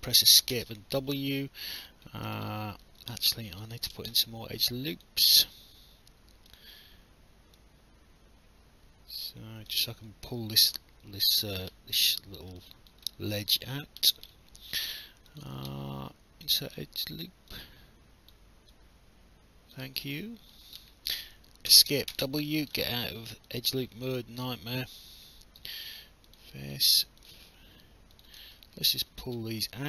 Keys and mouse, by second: 0.5 w, 1.3 alt+click, 2.5 alt+middle click, 3.0 alt+click, 3.3 alt+middle click, 4.9 click, 6.5 click, 7.6 click, 12.6 alt+click, 13.1 alt+middle click, 13.5 alt+click, 15.3 click, 16.4 click, 17.5 click, 18.7 click, 20.0 alt+click, 21.7 Escape, 22.1 w, 22.8 alt+middle click, 24.0 right click, 26.3 click, 27.2 shift+click, 28.5 alt+click.